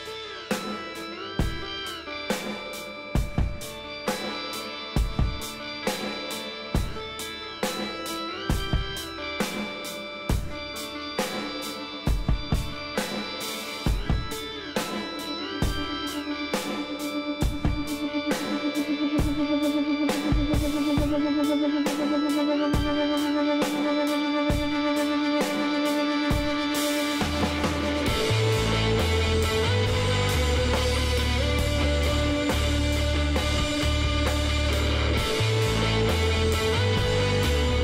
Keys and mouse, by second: 1.3-3.0 drag, 4.7 s, 7.8 ctrl+r, 10.6 click, 12.5 ctrl+r, 15.2 z, 15.4-18.2 middle drag, 18.0 click, 18.5-19.6 middle drag, 19.8 middle click, 20.8-22.0 middle drag, 22.0 KP_1, 23.5 shift+d, 27.2 p, 28.0 Tab, 28.3-30.1 drag, 31.0 h, 31.6 Tab, 31.9-33.6 drag, 32.5 Tab, 32.6 Tab, 33.1 Tab, 33.6 middle click, 36.1-37.8 drag.